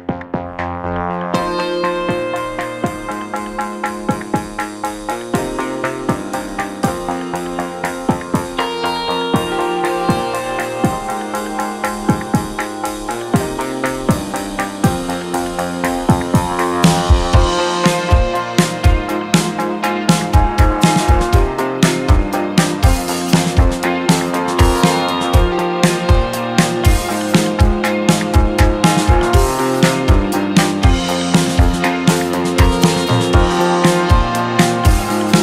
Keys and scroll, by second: 0.5 z, 9.0 g, 12.3 z, 21.5 2, 23.2 2, 25.2 shift+2, 28.7 ctrl+s.